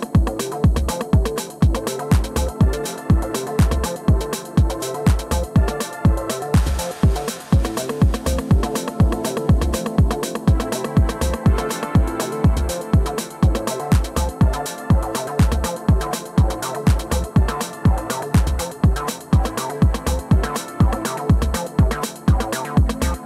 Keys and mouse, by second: 0.7 KP_0, 5.0-9.1 drag, 9.4-10.6 drag, 11.6-16.4 drag, 18.4-20.0 drag, 21.0 click, 22.0-23.0 drag.